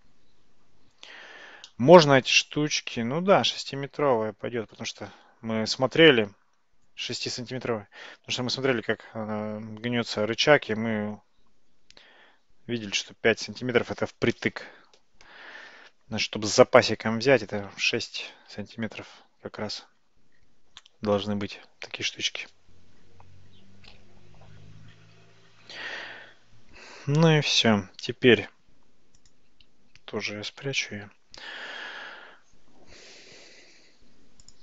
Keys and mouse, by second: 1.7-4.8 middle drag, 29.3 click, 30.5 h, 34.5 click.